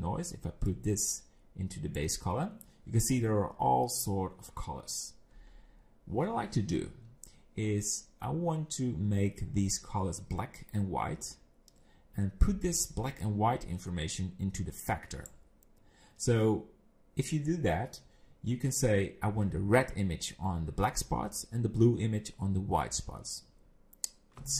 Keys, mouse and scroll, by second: 0.6 click, 13.2 click.